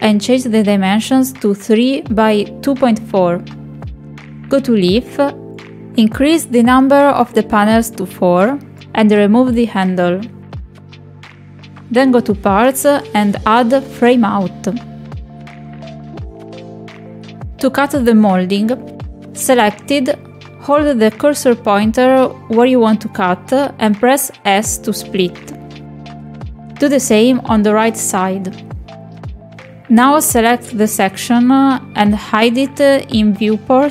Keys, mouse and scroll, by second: 0.4 click, 2.9 click, 6.2 click, 8.4 click, 10.0 click, 11.1-11.5 drag, 11.8 click, 12.6-13.0 drag, 14.0 click, 15.2 shift+click, 15.4 click, 15.8 shift+click, 17.7 middle click, 23.2 shift+middle click, 23.9 shift+middle click, 27.4-28.0 shift+middle drag, 28.8 click, 29.2 click, 30.6 click, 31.4 click, 33.5 click.